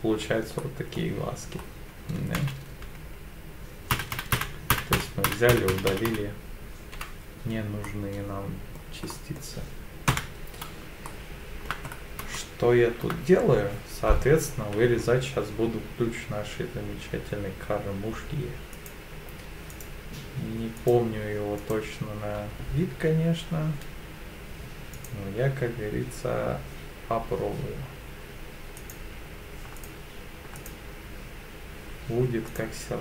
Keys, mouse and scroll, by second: 0.6 middle click, 1.5-2.0 scroll up 2, 2.4 ctrl+z, 3.9 ctrl+z, 4.3 ctrl+z, 4.7 ctrl+z, 5.3 ctrl+z, 5.5 ctrl+z, 5.7 ctrl+z, 5.9 ctrl+z, 6.1 ctrl+z, 7.8 middle click, 9.1 middle click, 10.1 KP_7, 11.1 shift+middle click, 11.9 scroll up 2, 12.3 shift+middle click, 14.6 k.